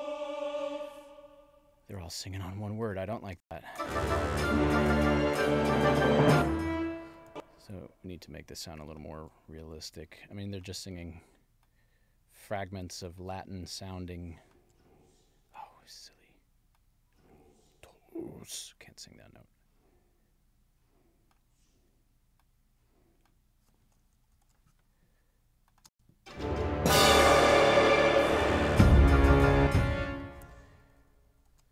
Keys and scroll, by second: 3.4 space, 6.2 space, 24.2 alt+Down, 25.9 space, 29.5 space, 30.8 alt+Down.